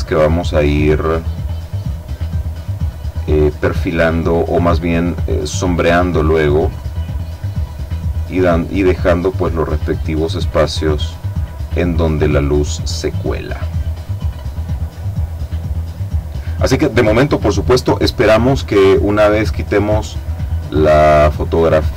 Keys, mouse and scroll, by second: 0.7 click, 1.7-3.7 drag, 4.1 click, 5.9 click, 6.9 click, 8.1 click, 9.4 click, 10.4-11.4 drag, 11.4 click, 12.7 click, 14.3 middle click, 14.4-16.5 drag, 18.3 click, 19.1 click, 20.2 click, 21.6 click.